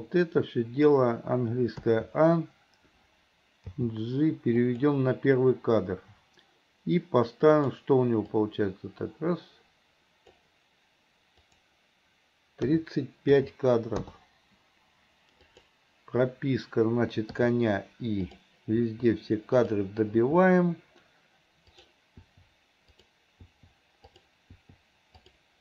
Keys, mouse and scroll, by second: 0.0-1.0 drag, 1.9 a, 3.8 g, 7.7 click, 8.5-10.5 drag, 11.4-14.1 drag, 15.6 click, 17.5 i, 18.4 drag, 18.9 i, 19.7 click, 21.9 drag, 22.3 i, 23.1 click, 23.5 i, 24.2 click, 25.3 click.